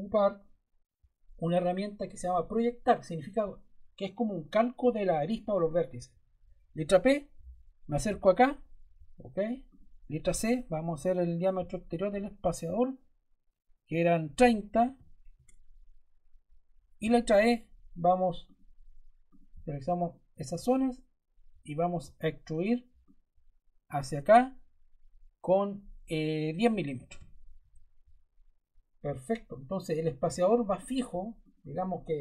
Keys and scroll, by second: 6.6 p, 10.1 c, 14.4-15.3 typing, 16.9 e, 26.7-27.5 typing.